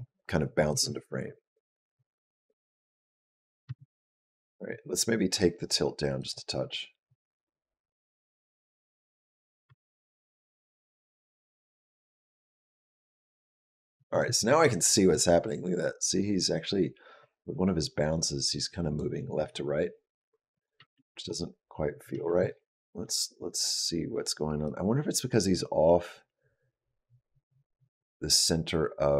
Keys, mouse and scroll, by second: 0.5 space, 3.5 space, 6.0 click, 6.9 click, 9.5 space, 13.8 space, 14.9 click, 20.4 click, 20.6 space, 21.9 space, 24.5 click.